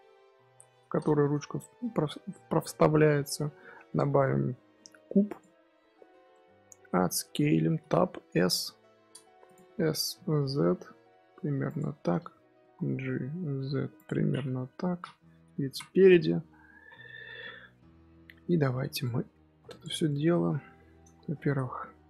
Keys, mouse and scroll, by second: 0.4 KP_1, 0.8-1.6 scroll up 3, 1.6 shift+a, 6.2-6.8 middle drag, 6.8 Tab, 7.7 s, 9.6 middle click, 10.0 s, 11.8 Tab, 12.0 middle click, 12.4 g, 14.5 KP_3, 15.6 KP_1, 16.4 Tab, 16.7 z, 17.1 shift+middle click, 17.5-17.9 scroll up 2, 18.8 1, 18.9 click, 20.0 shift+middle click, 20.3-21.5 scroll up 4.